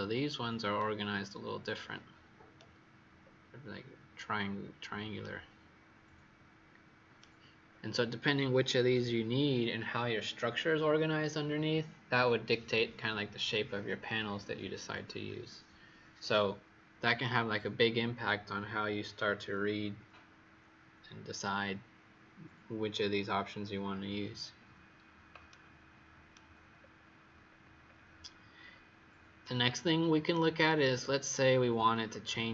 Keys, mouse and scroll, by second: 0.7 right click, 3.1-4.2 scroll up 1, 4.6-5.2 scroll down 1, 5.2 right click, 7.6-9.6 scroll down 2, 25.4 right click, 26.7-27.4 scroll down 2, 27.4-28.5 scroll down 3, 28.5-29.3 scroll up 3, 29.3 right click, 30.8-32.5 scroll down 2.